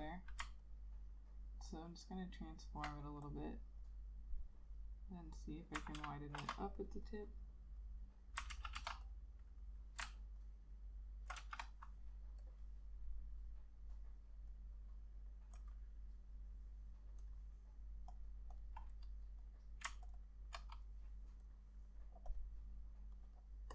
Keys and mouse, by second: 0.8 ctrl+alt+click, 2.2 ctrl+alt+click, 6.1 ctrl+z, 6.6 ctrl+z, 8.6 ctrl+z, 8.9 ctrl+z, 10.5 ctrl+alt+click, 11.5 ctrl+z, 20.2 ctrl+click, 20.3 ctrl+double click.